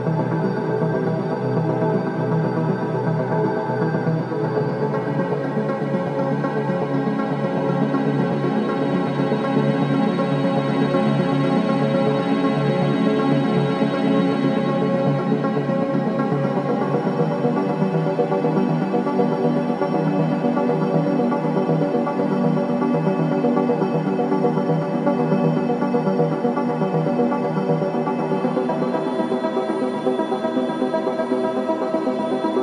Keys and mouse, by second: 0.0-1.5 drag, 1.7 ctrl+s, 3.2-13.1 drag, 15.2-18.9 drag, 21.6 shift+d, 22.1 Return, 23.2 r, 23.5 y, 24.5 click, 25.5 shift+d, 25.9 Return, 26.9 r, 27.2 y, 31.2 click, 32.3 shift+d.